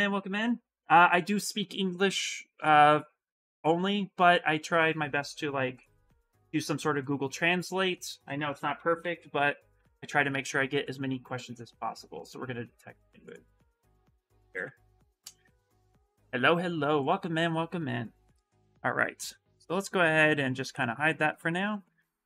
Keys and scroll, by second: 8.5-9.4 typing, 9.5 Return, 14.3 ctrl+v.